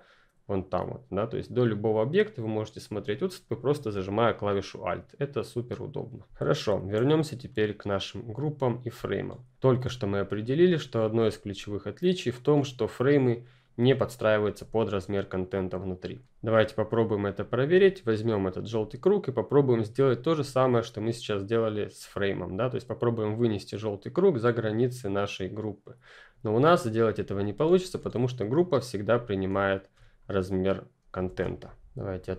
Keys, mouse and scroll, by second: 6.2 ctrl+F10, 6.4-8.6 ctrl+scroll up 4, 8.6-9.1 ctrl+scroll up 2, 9.1 click, 13.5 F10, 13.5 click, 16.0 click, 17.6 F10, 18.2 ctrl+click, 23.0-24.6 drag, 31.1 ctrl+z.